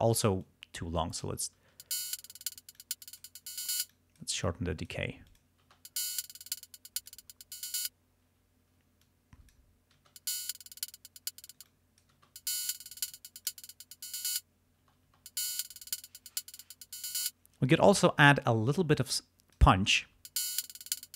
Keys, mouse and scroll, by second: 0.4-1.5 drag, 1.7 space, 2.8 click, 4.0 click, 4.5 click, 5.1 space, 5.3 click, 5.8 space, 6.3-7.4 drag, 8.3 space, 9.1 click, 10.2 space, 11.6 space, 11.7 click, 12.3 space, 13.2 click, 14.9 space, 17.2 space, 19.0 click, 20.1 space.